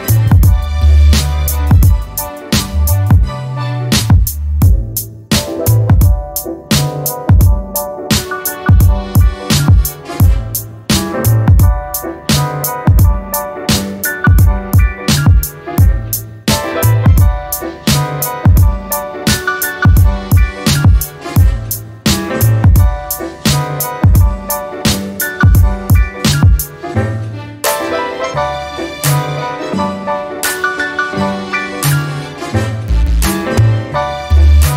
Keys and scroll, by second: 12.3 e, 32.0 1, 32.3 Return.